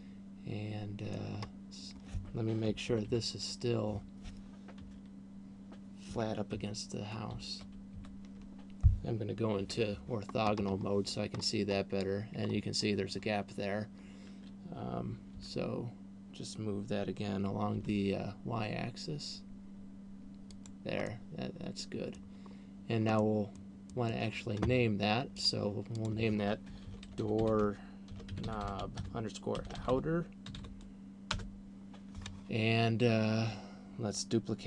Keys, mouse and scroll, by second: 1.8 scroll up 1, 3.3 ctrl+KP_4, 3.6 ctrl+KP_4, 5.3 KP_3, 6.8 ctrl+KP_4, 7.3 ctrl+KP_4, 7.6 ctrl+KP_4, 7.6 ctrl+KP_8, 8.3 ctrl+KP_8, 9.6 KP_5, 10.8-12.0 scroll up 9, 12.8-14.6 scroll up 1, 15.6 g, 21.1 click, 21.1 middle click, 23.1 scroll down 1, 23.8 middle click, 24.3 middle click, 25.8 click, 26.3 click.